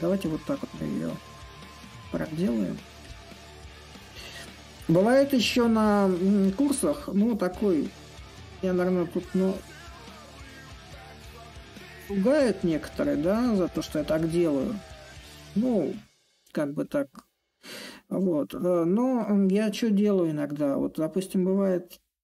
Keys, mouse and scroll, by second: 0.1-5.0 drag, 5.4-10.4 drag, 11.2-16.2 drag, 17.2-22.2 drag.